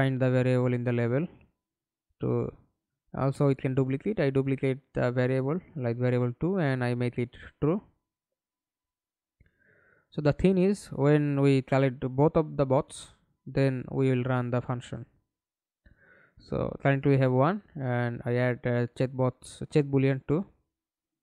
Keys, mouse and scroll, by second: 1.0 Right, 1.4 BackSpace, 2.1 2, 2.4 Return, 7.7 right click, 8.4-8.7 scroll down 1, 8.7 right click, 11.4 double click, 12.9 right click, 13.3-14.1 scroll up 2, 14.6-15.6 scroll up 2, 15.6 double click, 16.9-17.4 scroll up 2.